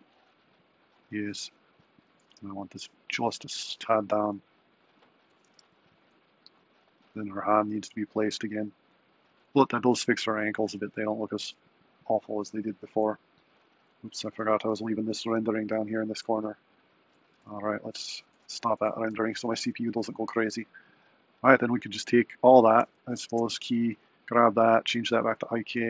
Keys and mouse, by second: 1.8 click, 2.3 g, 5.4 g, 18.1 z, 22.8 a, 23.2 i, 23.8 click, 24.9-25.8 drag.